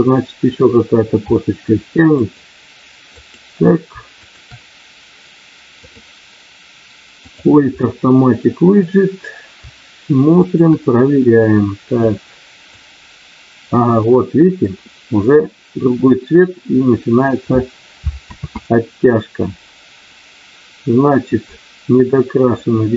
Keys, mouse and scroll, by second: 1.2 middle click, 2.1 click, 3.1 click, 4.2 shift+click, 5.9-7.5 drag, 7.8 middle click, 10.3 shift+click, 12.1 click, 14.0 middle click, 19.7 ctrl+z.